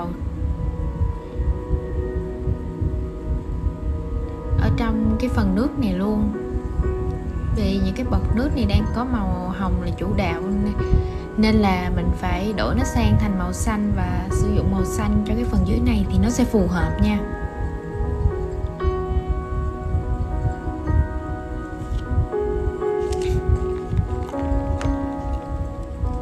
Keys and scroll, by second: 21.2 super+z, 21.5 super+z, 21.8 super+z, 22.1 super+z, 22.5 super+z.